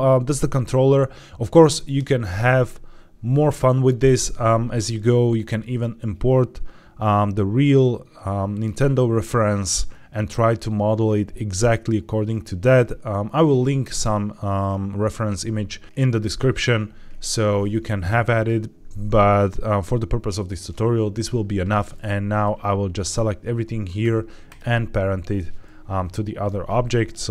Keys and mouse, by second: 0.2 shift+middle drag, 22.4-23.0 drag.